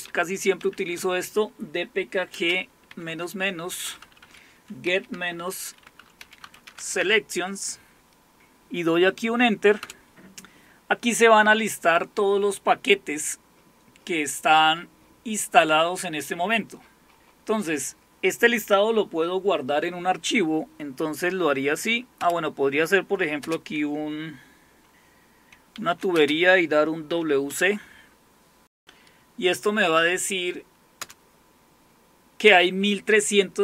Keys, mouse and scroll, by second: 0.0-0.9 typing, 2.3-7.5 typing, 9.8 Return, 16.7-19.9 scroll down 1, 22.2 Up, 23.4 space, 25.7-27.6 typing, 31.0 Return.